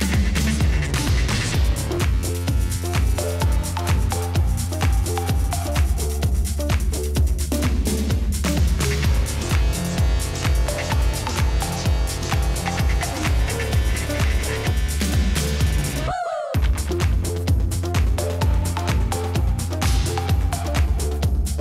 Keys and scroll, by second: 1.0 ctrl+d, 1.1 shift+Right, 1.2 shift+Right, 1.5 shift+Left, 1.6 shift+Left, 3.1-4.7 typing, 4.7 ctrl+c, 6.4 ctrl+v, 6.7 ctrl+v, 10.0 shift+Right, 10.2 shift+Left, 10.2 shift+Left, 10.3 shift+Left, 10.4 shift+Left, 10.6 shift+Left, 12.9 Right, 13.6 Right, 13.6 Left, 18.8-19.6 typing, 20.7-21.6 typing.